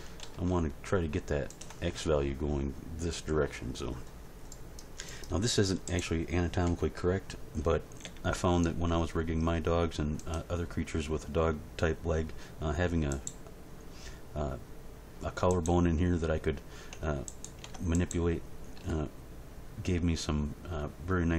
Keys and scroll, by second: 0.2 ctrl+r, 6.6 End, 8.0 g, 17.6 Tab, 18.8 r.